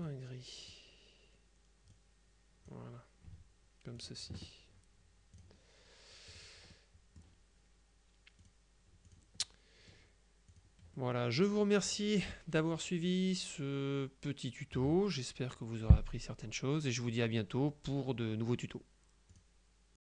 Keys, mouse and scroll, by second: 0.1 click, 2.0 click, 4.1 click, 5.4 click, 6.4 click, 6.8 right click, 8.5 click, 9.1 click, 9.5 right click, 10.6 click, 11.9 click, 19.5 click.